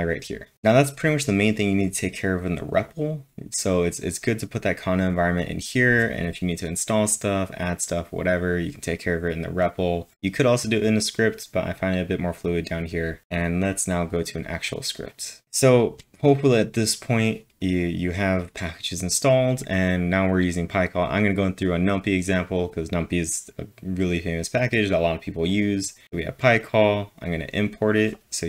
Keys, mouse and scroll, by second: 0.5 ctrl+l, 0.6-1.3 typing, 26.7 click, 27.2 click.